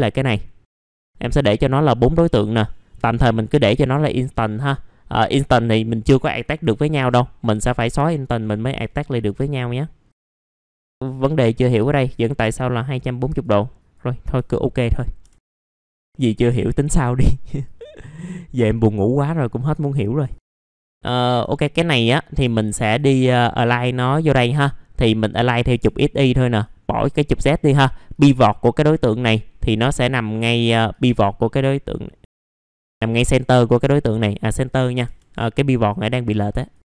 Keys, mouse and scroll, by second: 8.9 alt+middle click, 10.1 middle click, 10.7 click, 14.4 alt+middle click, 15.2 F4, 15.4 click, 15.7 scroll down 1, 15.8 scroll up 1, 16.1 middle click, 17.6 click, 18.2 middle click, 20.2 click, 21.5 middle click, 22.8-27.5 drag, 27.5 click, 35.0 F4, 36.6 click.